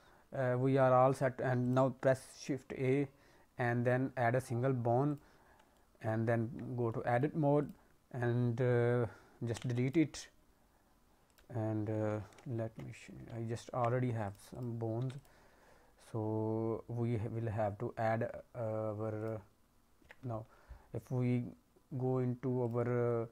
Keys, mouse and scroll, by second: 1.6 click, 2.5 shift+a, 5.7 alt+middle click, 6.0-6.8 scroll up 5, 6.3 Tab, 6.8 middle click, 7.5 click, 9.6 Delete, 11.2 click, 12.5 ctrl+Tab, 13.2 ctrl+Tab, 14.2 click, 14.5 click, 14.9 Delete, 19.2 click, 20.0 Tab, 21.3-22.1 scroll down 2.